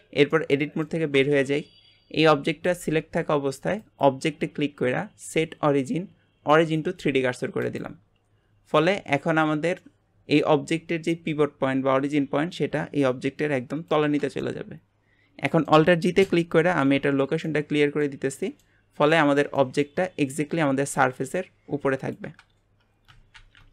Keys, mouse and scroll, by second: 0.3 middle click, 1.2 Tab, 3.8-7.0 drag, 8.8-11.8 middle drag, 14.4-16.7 middle drag, 16.7 alt+g, 17.5-20.1 middle drag, 20.1-20.4 scroll down 2, 20.4-23.4 middle drag, 23.4 shift+c.